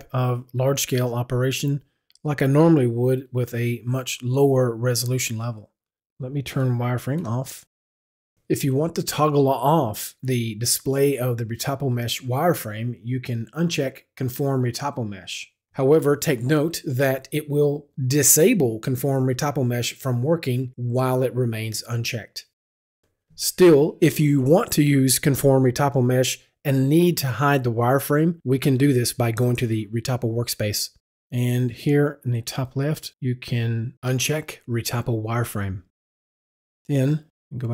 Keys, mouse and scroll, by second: 7.3 w, 14.0 w, 28.6 click, 29.7 click, 32.1 click, 35.2 click, 36.8 click, 37.4 click.